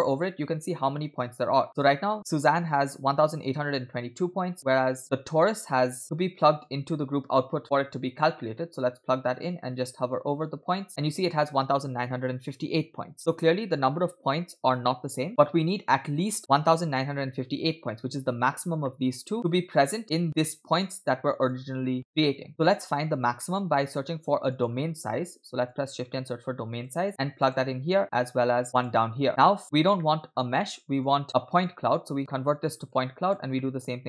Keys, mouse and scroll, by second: 6.0 scroll up 2, 6.6-8.3 drag, 8.6 middle click, 18.9 middle click, 19.7 middle click, 20.3-21.6 drag, 22.2 middle click, 22.7 middle click, 23.1 scroll down 2, 23.4 middle click, 23.8 shift+a, 27.4 click, 28.4 shift+d, 29.3 alt+right click, 30.0-30.6 scroll up 5, 30.0 middle click, 31.0-31.7 drag, 32.3 middle click, 32.9 click, 33.6 middle click.